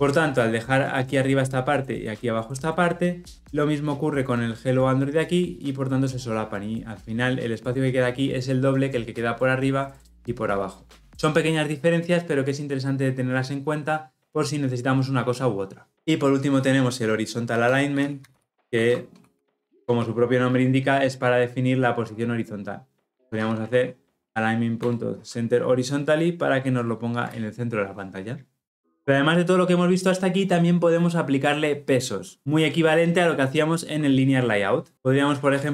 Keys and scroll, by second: 19.7 Return, 24.7 Return.